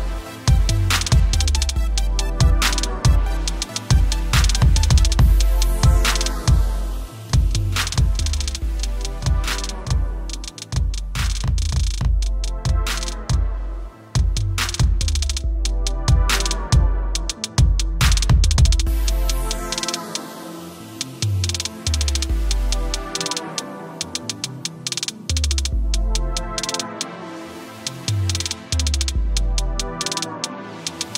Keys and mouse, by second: 0.0-3.7 typing, 0.0 click, 1.0 click, 2.0 click, 3.0 click, 3.6 click, 5.9 click, 9.5-9.9 typing, 10.2 click, 16.2 t, 17.2 Escape, 17.9 right click, 19.8 click, 20.7 ctrl+t, 22.8 typing, 23.3 click, 24.3 click, 25.0 click, 25.4 click, 25.7 ctrl+=, 25.9 space, 25.9 click, 26.3 click, 26.9 click, 27.5 click, 28.0 click, 28.4 click, 28.8 click, 29.0 Return, 29.5 click, 29.9 t, 30.3 alt+click, 30.6 Return, 31.1 right click.